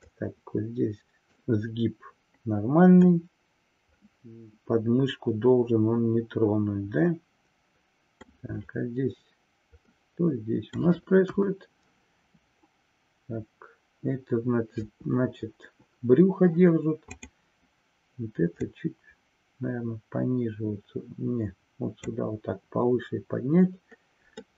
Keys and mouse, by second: 0.1-1.4 middle drag, 3.1-8.3 middle drag, 10.0 middle click, 11.3 KP_1, 17.1 click, 18.6-22.1 drag, 24.4-24.5 middle drag.